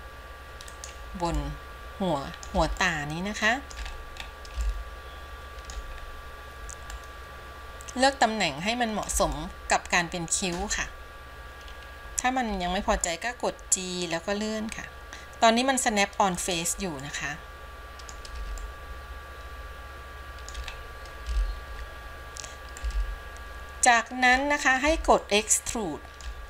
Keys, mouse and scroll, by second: 1.6-2.7 middle drag, 3.1 shift+middle click, 4.0-4.5 scroll up 2, 4.9-6.1 shift+middle drag, 6.3-7.1 scroll down 1, 7.1-9.3 middle drag, 9.6-10.8 shift+middle drag, 12.6 g, 17.2-18.3 middle drag, 18.9-20.8 shift+middle drag, 21.0-21.6 scroll up 1, 21.9-22.9 scroll down 1, 22.9-24.6 shift+middle drag, 25.4-26.4 shift+middle drag.